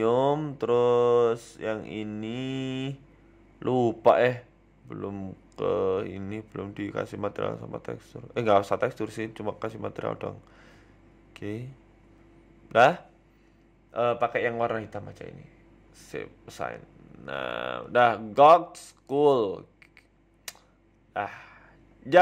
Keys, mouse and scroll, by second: 18.4 ctrl+s, 18.4 click, 18.4-18.7 scroll down 7, 19.0 shift+middle click, 19.2 middle click, 21.4 z.